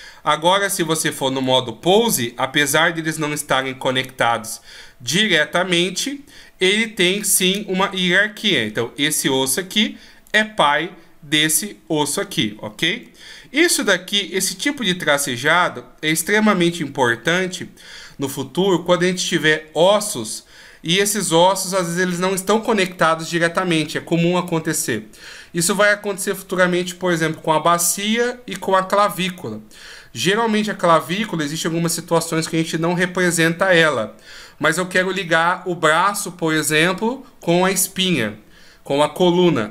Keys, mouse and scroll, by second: 0.9 right click, 1.5 g, 9.7 right click, 12.6 shift+scroll down 1.